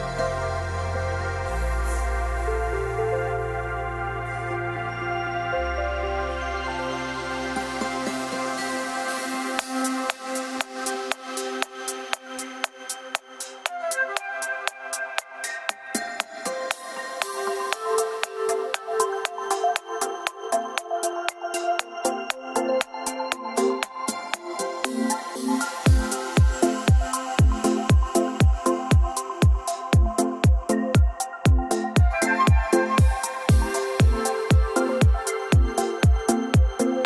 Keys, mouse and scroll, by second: 1.4-2.3 typing, 4.9-6.1 drag, 6.1-10.8 drag, 7.7 e, 10.8 f, 12.0-14.2 drag, 14.0-14.9 typing, 16.4 m, 17.2 Escape, 19.7 click, 19.9 e, 20.4 click, 23.1 click, 23.7-24.2 scroll down 4, 24.2-25.2 scroll up 3, 25.4 scroll up 3, 25.8 click, 26.4-26.9 scroll down 6, 27.5 click, 28.1 click, 29.0 click, 30.5 click, 31.3 click, 32.6 click, 33.1 click, 33.6 click, 34.5 click, 34.7-35.5 scroll up 6, 35.8 click, 36.4 click.